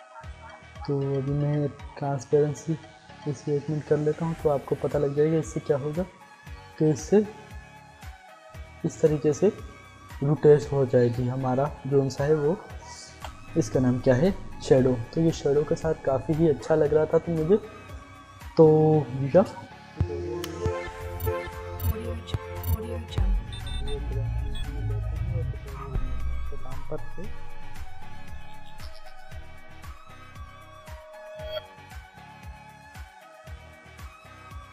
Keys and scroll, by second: 1.8 t, 12.1 ctrl+z, 20.1 Insert.